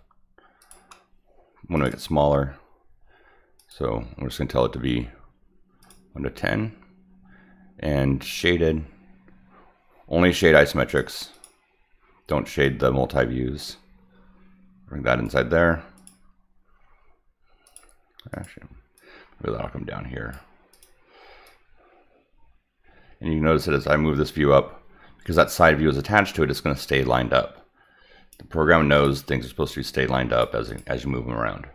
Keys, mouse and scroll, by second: 0.6 click, 1.7 click, 1.9 click, 3.5 click, 5.8 click, 8.3 click, 10.8 click, 11.3 click, 12.6-15.2 drag, 15.9 click, 17.6 click, 18.3 click, 18.9-20.3 drag, 20.7 click, 21.4-28.3 drag, 28.9 click, 29.6-30.4 drag, 30.6 click.